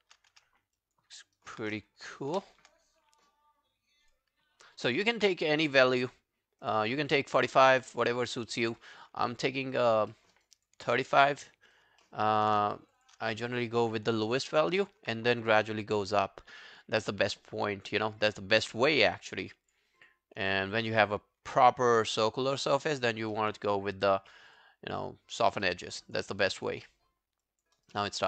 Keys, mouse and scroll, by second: 0.8 alt+click, 1.2 alt+middle click, 1.4 alt+right click, 4.5 scroll down 1, 4.9 alt+middle click, 7.1 alt+middle click, 7.3 alt+right click, 7.6 alt+click, 7.9 right click, 9.3 alt+middle click, 9.5 alt+right click, 9.7 alt+click, 10.1 alt+middle click, 10.4 alt+right click, 10.6 alt+click, 11.0 right click, 12.0 alt+middle click, 12.3 alt+right click, 12.9 shift+click, 13.0 shift+click, 13.3 alt+middle click, 13.5 alt+right click, 14.4 alt+middle click, 14.7 alt+right click, 20.0 double click, 20.5 alt+middle click, 20.8 alt+scroll down 1, 21.6 alt+middle click, 21.6 alt+scroll down 1, 21.9 alt+click, 23.4 alt+middle click, 23.7 right click, 25.7 alt+middle click, 25.9 alt+right click, 26.1 alt+click, 26.3 alt+middle click, 26.6 alt+scroll down 5, 26.9 alt+middle click, 27.4 alt+click, 27.8 alt+right click, 28.0 alt+click.